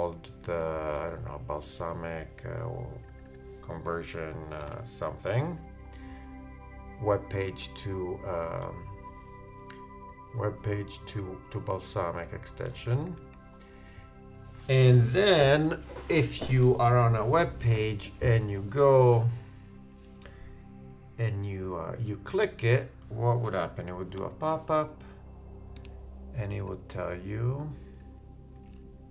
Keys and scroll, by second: 12.8 shift+Right.